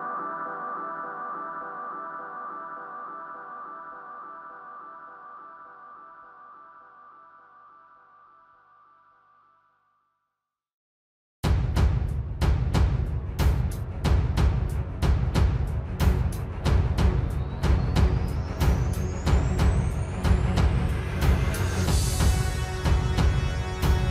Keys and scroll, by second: 11.0 ctrl+j.